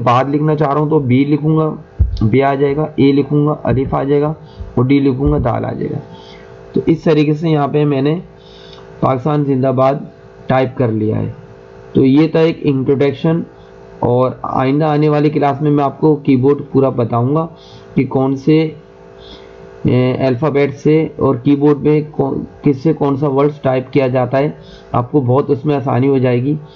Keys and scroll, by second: 2.0 b, 3.6 a, 5.2 d.